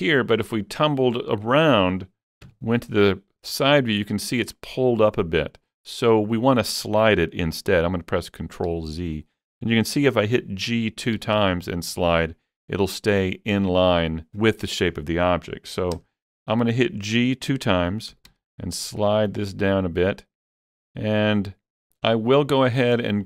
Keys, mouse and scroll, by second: 0.2-4.7 middle drag, 2.5 KP_3, 7.0 ctrl+KP_3, 7.0-11.2 middle drag, 7.0-8.8 drag, 8.8 ctrl+z, 11.2 g, 11.5 g, 14.0 ctrl+z, 14.0 right click, 14.0 g, 16.0 right click, 16.0 KP_7, 16.0 g, 18.3 g, 20.8 click.